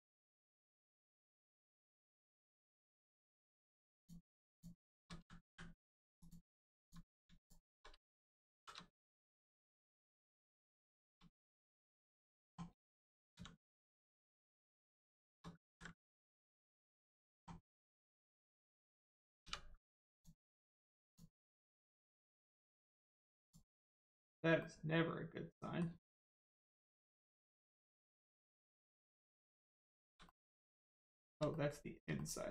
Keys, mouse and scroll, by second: 1.9 middle click, 3.9 click, 4.5 shift+click, 5.4 m, 6.2 click, 7.3 shift+click, 8.5 shift+r, 8.9 click, 10.8 shift+middle click, 11.5 middle click, 11.5 middle click, 11.9 shift+middle click, 13.3 x, 14.7 click, 15.2 shift+middle click, 15.5 ctrl+middle click, 15.6 ctrl+z, 16.1 middle click, 16.8 shift+middle click, 17.8 middle click, 17.9 middle click, 20.1 click, 21.0 shift+click, 22.0 middle click, 22.9 click, 23.7 middle click, 26.0 shift+middle click, 27.5 middle click, 27.5 middle click, 29.7 shift+middle click, 30.3 middle click, 30.3 middle click, 30.9 shift+middle click, 31.5 middle click, 31.5 middle click, 32.1 shift+middle click.